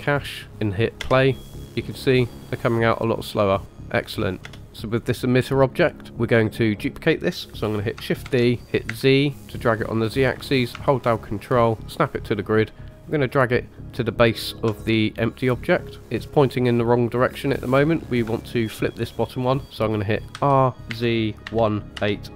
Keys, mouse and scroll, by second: 1.0 space, 4.6 space, 4.9 click, 8.3 shift+d, 16.0 shift+middle click, 20.3 r.